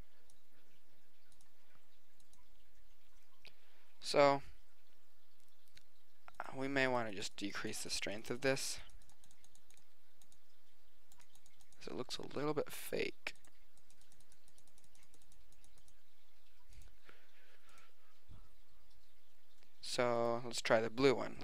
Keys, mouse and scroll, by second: 6.4-8.8 drag, 13.9 middle click, 19.6 middle click, 20.2-21.4 right drag.